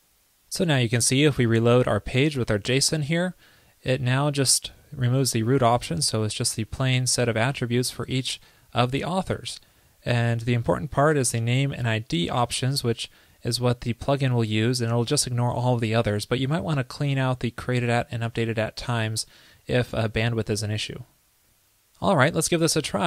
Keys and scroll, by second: 2.9 super+r.